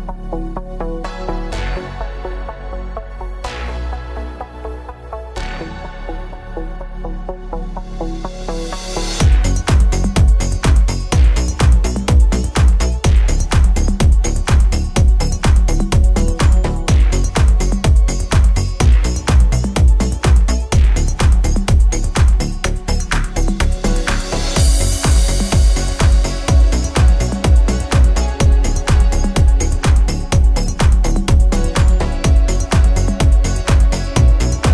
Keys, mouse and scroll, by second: 2.8 ctrl+g, 5.5 click, 8.7-11.0 drag, 11.0 Tab, 17.5 Tab, 20.3 click, 29.3 ctrl+Num_Lock, 29.3-30.0 scroll up 1, 34.6 ctrl+F7.